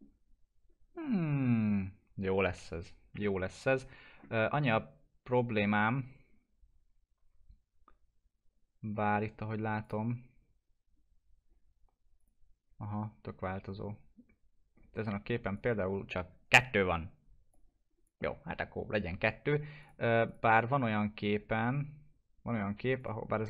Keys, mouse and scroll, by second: 0.0-0.4 scroll down 1, 0.9 scroll up 1, 6.6 scroll down 1, 9.8 click, 12.1 click, 15.5-19.8 drag, 22.9 click.